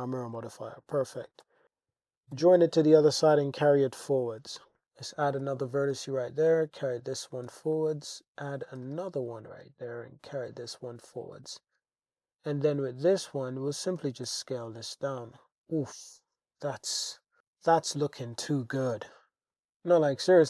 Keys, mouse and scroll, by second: 0.4 Tab, 1.1 g, 1.5 x, 2.3 g, 2.6 y, 3.8 click, 4.8 super+r, 5.2 g, 5.4 y, 6.8 click, 7.5 super+r, 7.7 click, 8.8 g, 8.9 g, 9.5 click, 9.9 g, 9.9 y, 11.1 click, 12.5 g, 12.7 g, 14.0 click, 14.3 Tab, 15.9-16.9 middle drag, 18.1 shift+drag, 19.0 alt+h, 19.7 Tab.